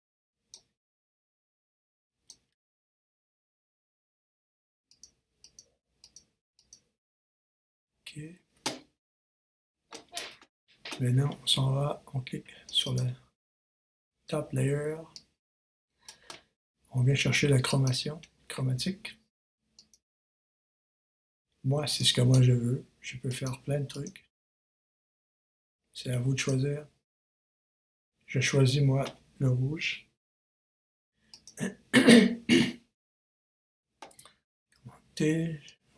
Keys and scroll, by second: 3.0 super+s, 3.2 super+Return, 34.7 super+t.